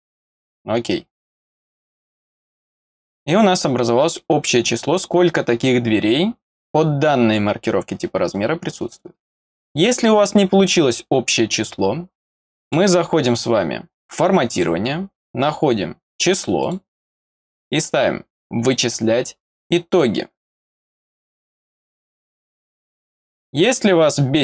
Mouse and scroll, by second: 0.3 click, 2.8 click, 12.6 click, 14.5 click, 16.6 click, 19.9 click, 22.5 click.